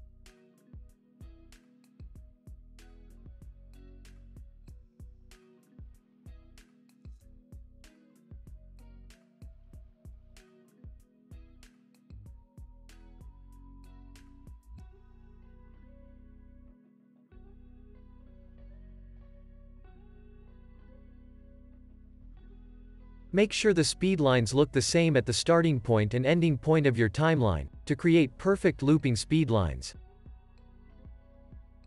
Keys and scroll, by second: 0.8 super+s, 5.6 Right, 6.3 Right, 7.0 Right, 8.3 super+d, 11.4 Right, 11.9 Right, 12.4 Right, 14.5 super+d, 24.0 super+s.